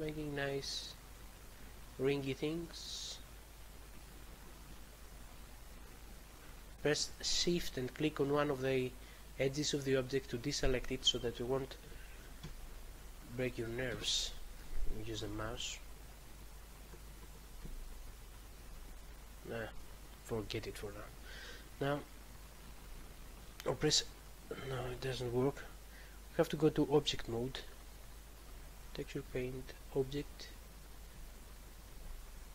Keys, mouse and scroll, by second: 0.0 click, 0.4 click, 0.8 click, 1.1 click, 1.4 click, 3.7 click, 4.2 click, 5.0 click, 5.6 click, 6.2 click, 10.1 shift+click, 10.7 shift+click, 12.6 shift+click, 13.0 shift+click, 13.1 shift+double click, 13.6 shift+click, 14.1 ctrl+click, 16.3 shift+click, 16.9 shift+click, 17.8 ctrl+click, 22.4 click, 22.9 click, 23.0 click, 23.2 double click, 23.3 double click, 23.9 a, 26.9 click, 28.4 click, 28.5 click, 28.8 double click, 28.8 double click, 29.3 click, 29.4 click, 29.9 click, 30.0 click, 31.5 shift+click, 32.0 a.